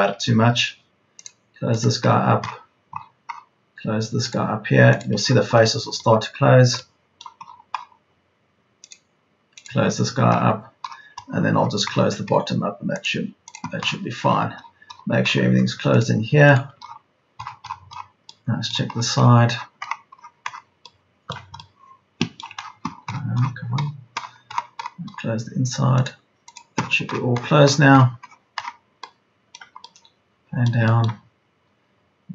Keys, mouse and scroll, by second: 8.1 Escape, 23.1 Escape, 31.1 Escape.